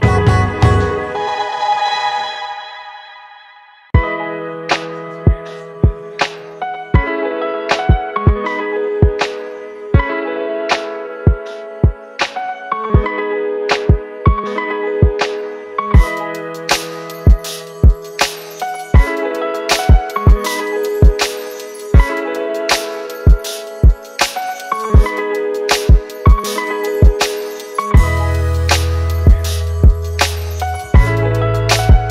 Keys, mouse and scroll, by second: 15.6 ctrl+click, 20.6 right click, 31.4 ctrl+t.